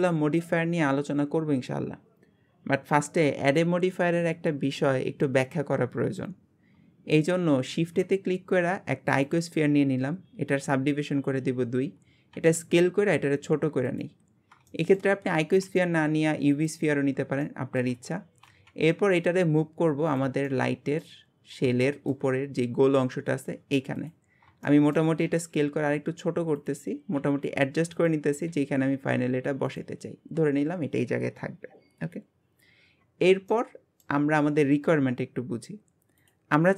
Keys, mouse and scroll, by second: 7.7 shift+a, 9.7-12.4 scroll down 1, 12.4 s, 14.2-14.7 scroll up 1, 14.7-15.2 shift+middle drag, 15.2 scroll up 2, 15.7 s, 17.5-18.5 shift+middle drag, 18.5 g, 20.5-21.2 shift+middle drag, 21.2 scroll up 3, 21.8-22.3 shift+middle drag, 22.3-23.0 scroll up 1, 23.0 g, 24.3-24.7 scroll up 3, 24.7-25.3 shift+middle drag, 25.3 s, 30.2-31.4 scroll down 1, 31.4-33.0 scroll down 1, 33.0-33.5 scroll down 10, 33.5-34.3 middle drag, 34.3-36.7 scroll down 1, 36.7 scroll down 1.